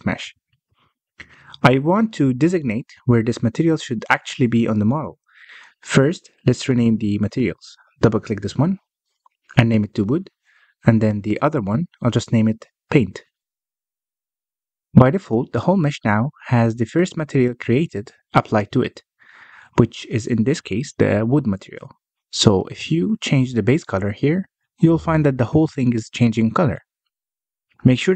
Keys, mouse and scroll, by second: 0.6 click, 1.1 click, 1.6 click, 4.4-7.5 middle drag, 7.5-11.0 drag, 11.0 i, 11.8 BackSpace, 12.4 o, 13.8 click, 14.0-17.0 drag, 17.3 click, 18.5-21.5 middle drag, 21.5 z, 23.4 click.